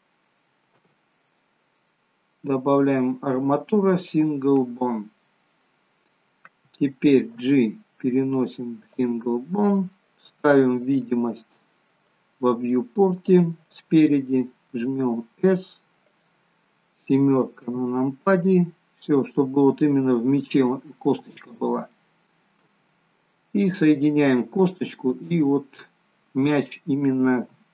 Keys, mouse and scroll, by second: 0.8 shift+a, 8.9 g, 11.0 click, 14.9 s, 17.8 KP_7, 19.4-20.5 scroll up 2, 20.5 middle click, 20.5 scroll up 2, 22.0 shift+middle click, 23.7 click, 25.2 shift+click.